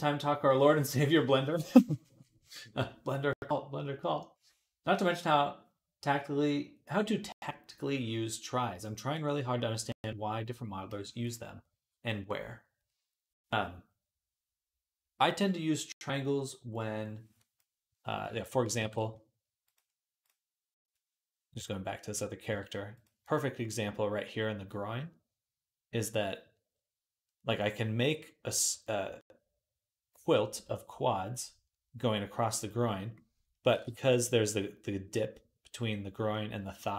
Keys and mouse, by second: 18.1 ctrl+Tab, 18.7 ctrl+s, 22.3 q, 33.1-36.9 middle drag.